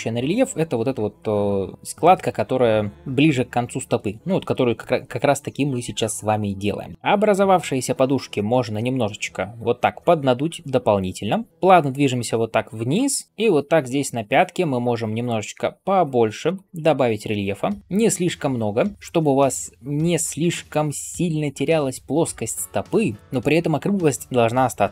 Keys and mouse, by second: 7.1-7.4 ].